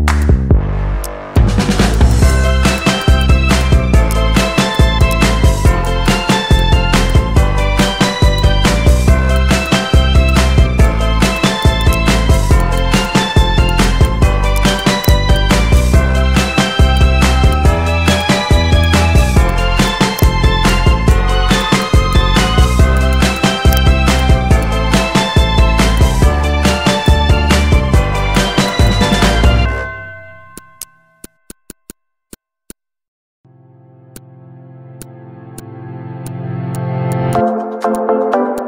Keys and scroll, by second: 0.7 ctrl+g, 1.3 z, 12.9 z, 29.4 Delete.